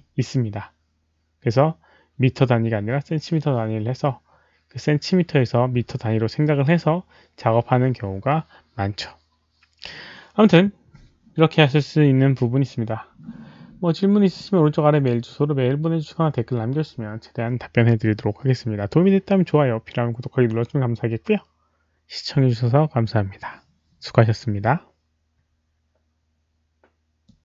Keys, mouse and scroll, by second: 27.2 click.